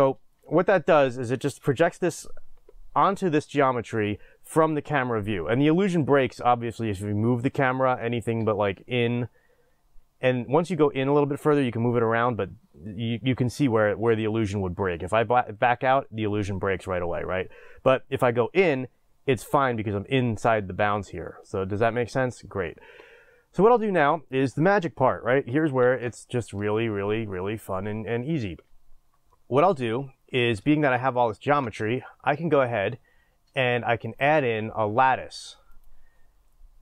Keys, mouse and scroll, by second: 0.0 click, 14.9 scroll down 1, 17.2 scroll up 1, 21.3 scroll down 1, 23.7 click, 30.8 Tab, 35.8-36.8 drag.